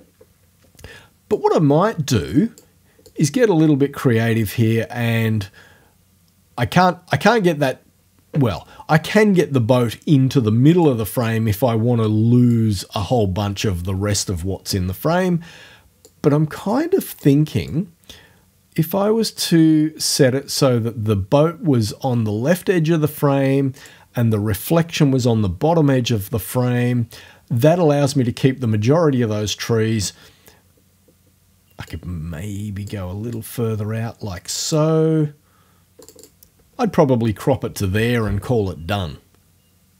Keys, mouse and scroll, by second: 1.4-2.8 drag, 3.1-7.5 drag, 9.6-11.0 drag, 11.2-12.7 drag, 16.1-17.4 drag, 17.4 middle click, 17.7-24.1 drag, 24.1-29.3 middle drag, 31.9-33.1 drag, 33.4-35.0 drag, 36.0 click.